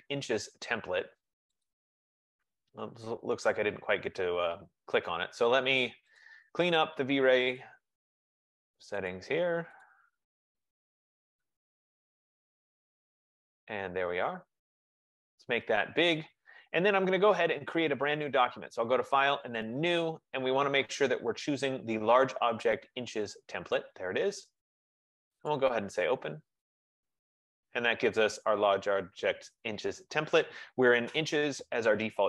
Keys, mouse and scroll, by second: 1.9 click, 6.3 click, 7.8 click, 8.5 click, 9.3 click, 9.7 F15, 10.0 click, 11.0 click, 13.3 click, 18.6 click, 19.9 click, 20.1 middle click, 23.3 middle click, 23.9 middle click, 26.0 click.